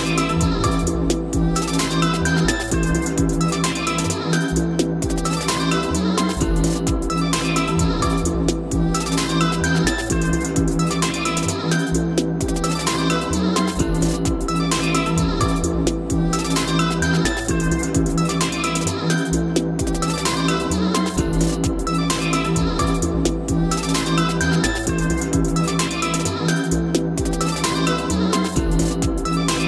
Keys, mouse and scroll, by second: 1.2 click, 3.5-4.1 scroll down 2, 4.1-5.1 scroll down 2, 5.3 click, 7.2 click, 9.4 click, 9.4 d, 9.8-10.2 scroll down 2, 10.2 o, 12.2-12.8 scroll down 3, 12.8-13.4 scroll up 2, 13.9 click, 15.6-19.7 drag, 21.2 o, 21.8 click, 22.2 click, 22.9 click, 23.7 click, 24.1 click, 26.6 click, 27.6 click, 28.0-29.0 typing.